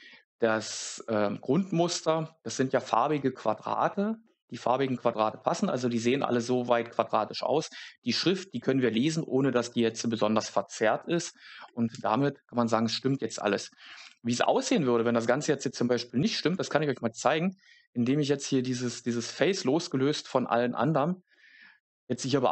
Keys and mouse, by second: 11.9 Tab, 14.0 3, 15.9 s, 20.1 click, 21.7 Tab.